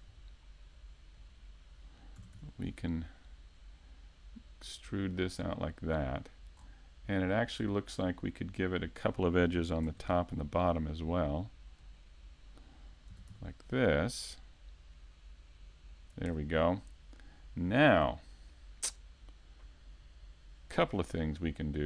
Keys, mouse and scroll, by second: 5.9 click, 6.6-8.9 scroll down 2, 8.9-9.4 scroll down 1, 9.8 ctrl+r, 12.2 click, 16.0 click, 20.7 middle click.